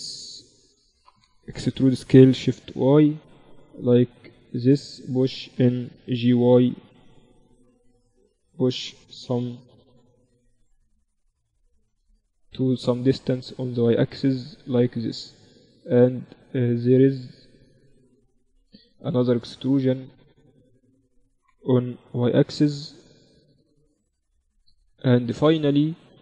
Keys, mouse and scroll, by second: 1.1 e, 4.3-6.9 middle drag, 5.7 g, 8.7 KP_7, 9.5 z, 12.8-14.7 drag, 20.0-21.8 drag, 21.3 e, 25.7-26.2 middle drag.